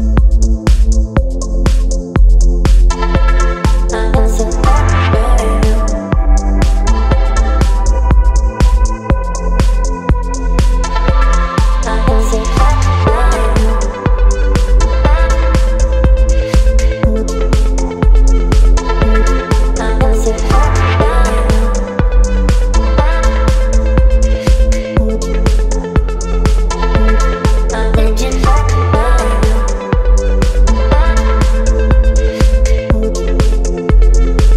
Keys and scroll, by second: 0.5 space, 8.5 ctrl+t, 11.4 Return, 12.6 space, 24.0 ctrl+t, 31.7 Return, 34.0 space.